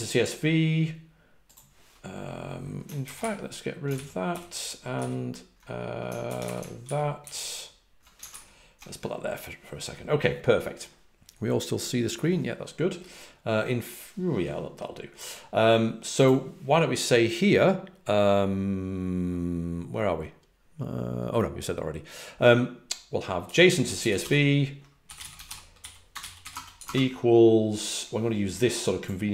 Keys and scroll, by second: 4.2 ctrl+c, 4.2 ctrl+d, 4.9 ctrl+c, 7.2 ctrl+d, 8.2 alt+super+Right, 23.5-27.2 typing.